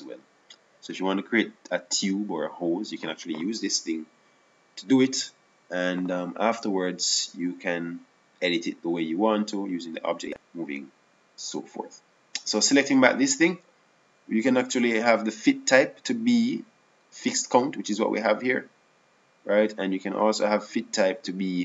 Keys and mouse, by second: 14.3-15.7 right drag, 15.7 click.